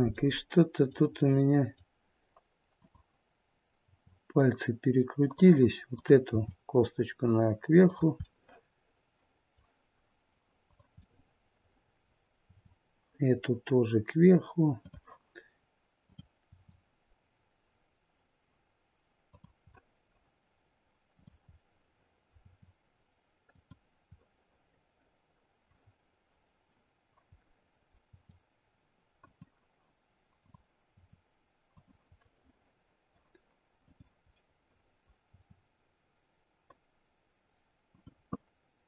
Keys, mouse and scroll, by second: 0.0 middle click, 1.0 middle click, 2.7 click, 3.7 r, 6.4 click, 6.4 r, 8.1 middle click, 10.5 click, 11.1 middle click, 12.4 r, 15.9 click, 16.5 r, 19.6 middle click, 21.0 click, 21.6 middle click, 22.3 r, 24.2 middle click, 25.8-27.1 scroll down 1, 27.1 scroll down 1, 27.3 middle click, 28.0 r, 30.3 click, 30.8 r, 32.1 middle click, 33.7 click, 34.3 middle click, 35.2 r.